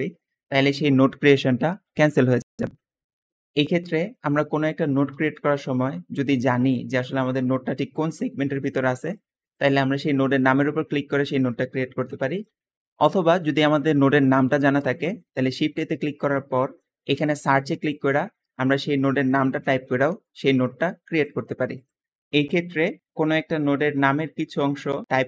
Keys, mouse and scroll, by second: 3.4 click, 3.8 middle click, 4.9 shift+a, 15.3 shift+a, 19.3 r, 19.6 g, 19.8 b, 22.6 shift+a, 25.0-25.2 typing.